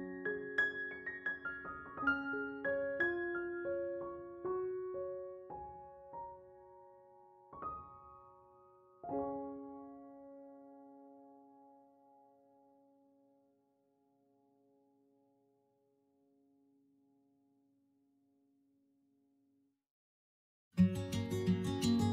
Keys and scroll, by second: 5.8 ctrl+z, 16.7 s.